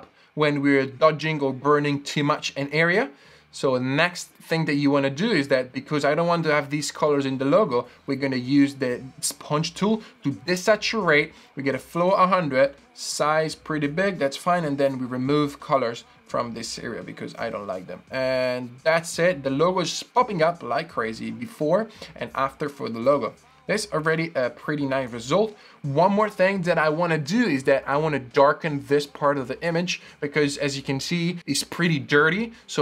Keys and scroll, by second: 23.9 super+d.